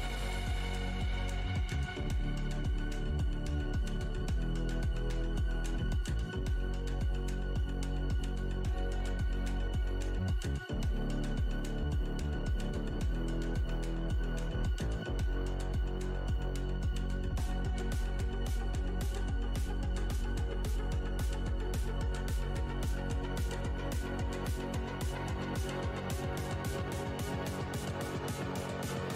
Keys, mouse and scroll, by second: 0.4 scroll up 1, 2.5-3.6 scroll up 1, 3.6 click, 6.6 shift+h, 7.3 w, 11.9 shift+scroll down 1, 11.9 x, 13.8-14.4 scroll down 1, 14.4 click, 15.0-16.2 typing, 17.3 alt+scroll up 2, 18.6 shift+x, 19.2 alt+`, 19.5 shift+v, 20.2 `, 22.6 alt+scroll, 22.7 scroll up 2, 23.6-24.1 scroll, 25.2 click, 26.0 w, 26.2-26.6 alt+scroll up 2, 26.7 shift+x, 27.6 r, 28.2 click.